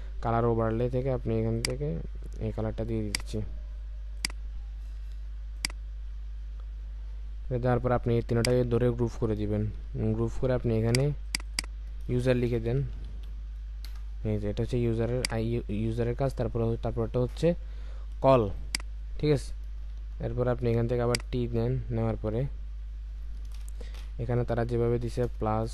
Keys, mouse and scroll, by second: 8.4 shift+click, 9.6 ctrl+g, 11.2 double click, 12.7-13.1 typing, 15.9 Return, 16.2-17.2 alt+scroll up 1, 18.5 space, 20.6 typing, 25.0-25.7 typing.